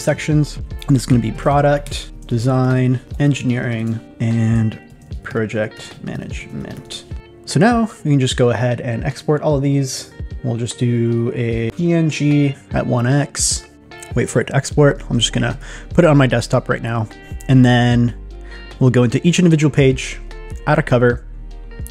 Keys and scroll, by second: 1.2 shift+p, 2.3 shift+d, 3.0 shift+e, 5.0 shift+p.